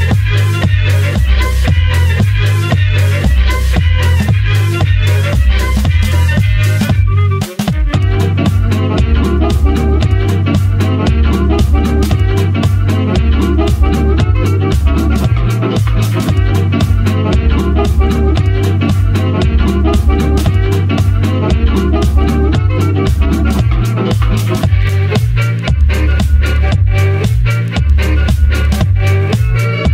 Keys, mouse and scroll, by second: 4.8 KP_0, 5.2-6.3 scroll up 3, 6.3 click, 7.0 click, 7.5 scroll down 1, 7.7 scroll up 1, 8.3 scroll down 1, 8.6 ctrl+b, 9.8-10.1 scroll up 3, 10.1 scroll down 2, 10.4 click, 10.6 scroll up 1, 11.5-13.1 drag, 20.7 shift+a, 21.7-26.4 drag, 27.3-27.6 scroll up 4, 29.0 click.